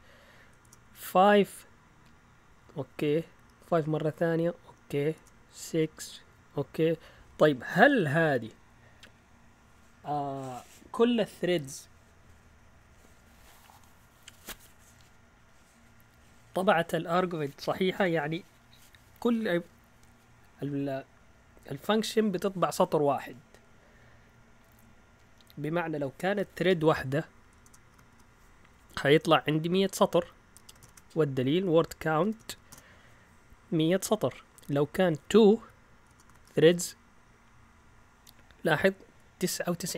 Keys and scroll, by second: 0.6 BackSpace, 0.8 5, 1.2 Return, 2.6 Up, 3.6 Return, 4.6 Up, 5.1 BackSpace, 5.5 6, 5.7 Return, 27.0 Up, 27.6 BackSpace, 27.9 1, 28.1 Return, 29.5 Up, 30.5-33.1 typing, 34.4 Up, 34.4-37.1 typing, 34.6 Left.